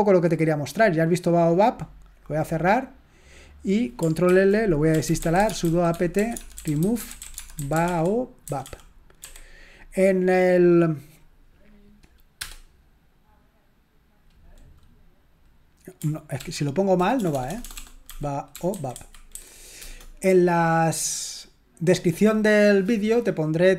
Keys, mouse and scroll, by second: 2.6 click, 3.5 click, 4.3 ctrl+l, 4.6-9.2 typing, 13.1 Return, 16.3 ctrl+p, 17.1-19.8 typing.